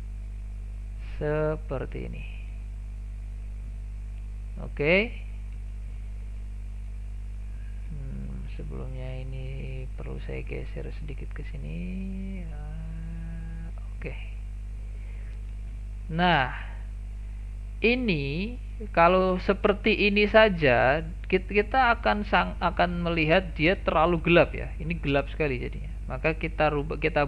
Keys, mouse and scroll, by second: 0.5-0.8 scroll down 1, 0.8-1.2 middle drag, 1.2-1.9 scroll up 2, 1.9-2.4 middle drag, 2.4 scroll up 2, 2.6-3.1 shift+middle drag, 3.1-4.8 scroll down 1, 5.4 scroll down 4, 5.7 shift+middle click, 6.1 scroll down 2, 6.4 shift+middle click, 7.3-8.0 scroll up 7, 8.0 shift+middle click, 8.9-15.1 drag, 15.4 scroll down 3, 15.7 shift+middle click, 16.1 scroll down 2, 16.3-17.8 shift+middle drag, 17.8 click, 18.6 scroll down 1, 18.9-19.6 shift+middle drag, 19.6 click, 20.2 click, 21.5 click, 22.7 click, 23.6-26.6 drag.